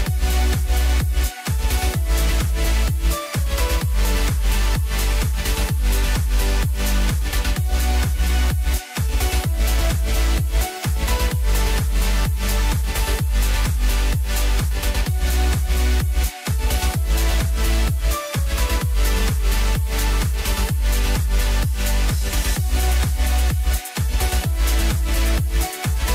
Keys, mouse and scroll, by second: 1.7-4.7 drag, 11.0 drag, 12.7 Tab, 13.7-15.3 scroll up 2, 15.3 click, 19.2 KP_1, 21.3 shift+click, 23.9 click, 25.0-26.1 drag.